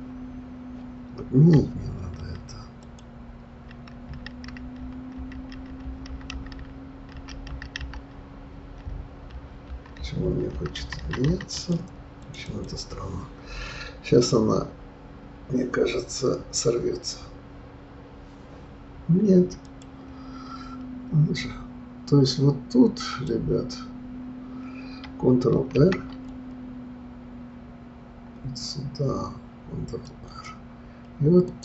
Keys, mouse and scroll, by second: 3.1 ctrl+click, 4.6 ctrl+z, 8.5 ctrl+z, 17.8-19.6 right drag, 19.6 click, 21.0-21.9 scroll up 2, 23.5 click, 25.7 ctrl+r, 31.5 click.